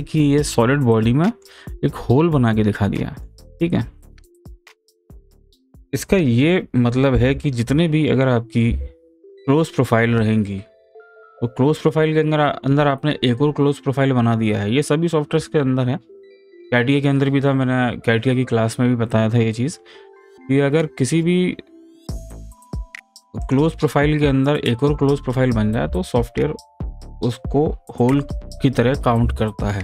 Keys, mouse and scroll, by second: 7.1-8.7 middle drag, 8.7 ctrl+z, 11.0 click, 23.4 click, 24.0 click.